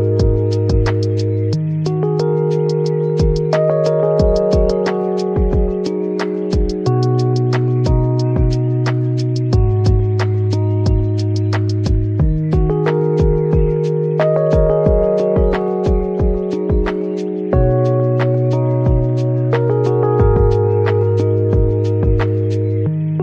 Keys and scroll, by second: 18.4 a.